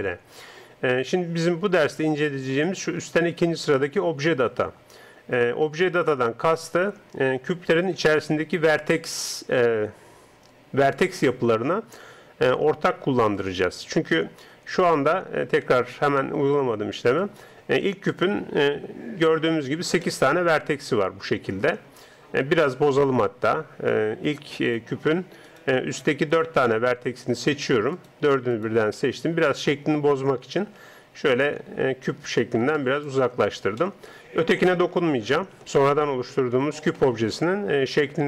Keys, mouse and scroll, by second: 17.2 right click, 18.1 Tab, 19.5-22.7 middle drag, 22.7 right click, 25.5-30.5 right drag, 26.7-30.8 middle drag, 30.8 s, 33.3 Tab, 33.8 middle click, 34.6 right click.